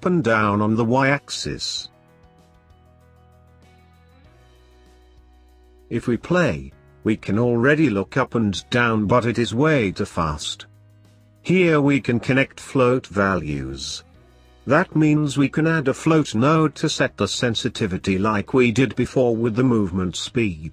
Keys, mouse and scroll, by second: 0.3 click, 2.6-5.8 drag, 11.5 click, 12.5 click, 14.1 click, 15.2 click, 16.9 scroll up 1, 17.1-18.4 middle drag, 18.4 shift+a.